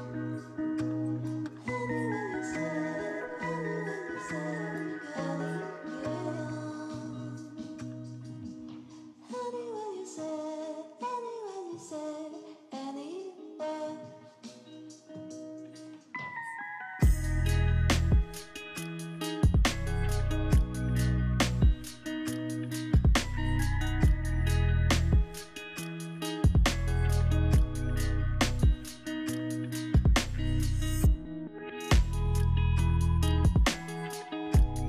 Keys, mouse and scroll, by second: 10.6-11.6 scroll up 3, 11.6-14.8 scroll down 3.